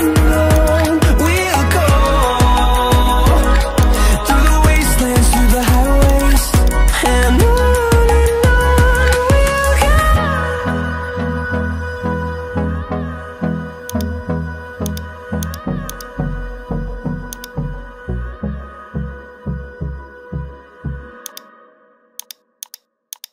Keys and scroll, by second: 1.8-3.4 typing.